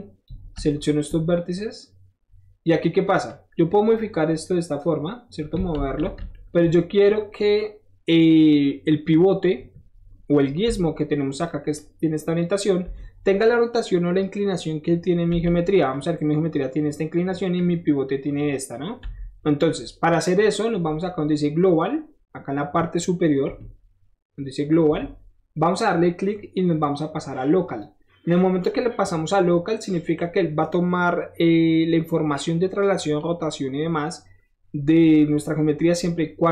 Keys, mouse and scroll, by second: 0.5 shift+middle click, 0.7 shift+middle click, 1.3-3.3 shift+middle drag, 3.3-5.6 shift+drag, 5.7 ctrl+z, 6.8 middle click, 10.1 middle click, 10.8 7, 11.1-11.5 drag, 11.7 click, 15.4 7, 15.9-16.6 drag, 17.6 click, 20.3 middle click, 20.8 middle click, 25.8 click, 27.7 click, 29.3 scroll down 1, 29.6 middle click, 35.2 scroll down 1, 35.5 middle click, 35.5 scroll up 1.